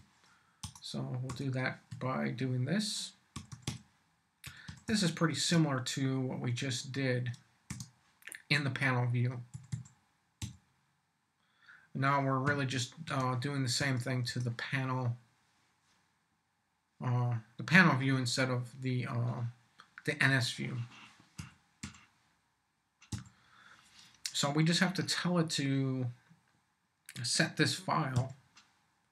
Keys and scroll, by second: 0.0-1.9 typing, 0.6 Return, 3.1-5.3 typing, 7.7 shift+9, 9.5 s, 10.4 ,, 12.4 3, 13.0 shift+0, 13.8 shift+Return, 21.4 p, 21.8 v, 23.1 ●, 28.1 q.